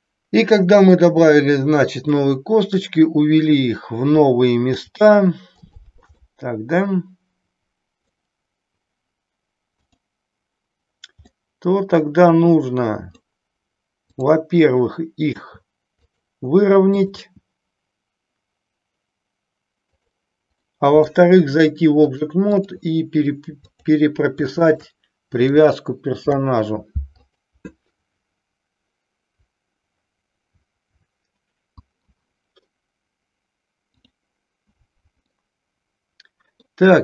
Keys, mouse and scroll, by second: 2.1 middle click, 4.6 g, 6.1-8.1 middle drag, 9.8 click, 11.4-13.2 middle drag, 14.0 click, 15.4 g, 16.9 click, 17.8 g, 20.6 middle click, 22.0 click, 23.7 click, 24.5 shift+click, 26.3 ctrl+p, 34.5-35.4 drag, 35.5-36.7 middle drag.